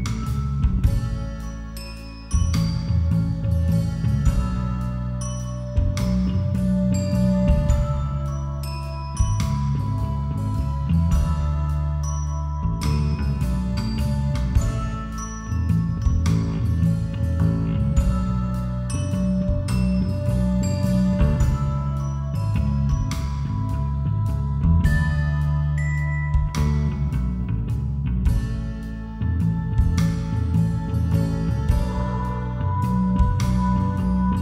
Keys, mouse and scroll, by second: 2.3 click, 6.4-7.5 drag, 6.9 a, 7.5-8.9 middle drag, 9.8 middle click, 10.7-15.9 right drag, 15.9 middle click, 17.0 e, 20.9 click, 20.9 KP_5, 21.1 KP_1, 21.9 e, 24.1 a, 25.0-27.3 middle drag, 27.4 shift+r, 27.7 2, 28.4 Escape, 28.7 a, 30.4 shift+r, 31.2 a, 31.7-33.3 right drag, 33.6 shift+r.